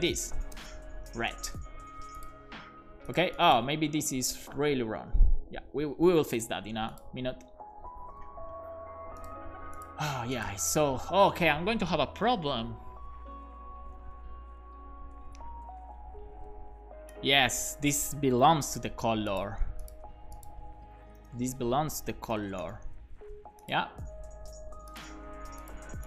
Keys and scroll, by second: 0.0-1.8 typing, 8.0 super+Left, 10.1 super+s, 18.7 super+x, 21.0 Return, 21.2 super+v, 21.5 super+s, 22.3 alt+shift+f, 22.6 super+s, 25.1 super+s.